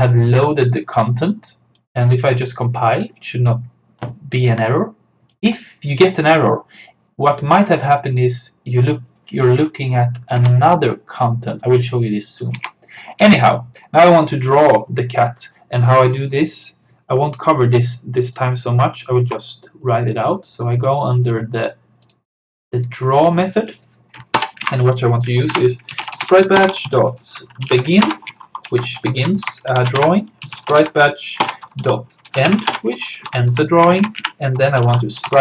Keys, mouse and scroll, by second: 0.5-7.9 drag, 9.4 click, 10.4 alt+Tab, 12.7 alt+Tab, 13.3 click, 13.8-14.1 scroll down 1, 15.3 click, 16.4 scroll down 1, 18.4 click, 22.9-23.2 scroll down 1, 23.7 click, 24.4 Return, 24.7 Up, 25.6 Return, 25.7-35.4 typing, 29.8 Return, 31.5 Return, 34.2 Up.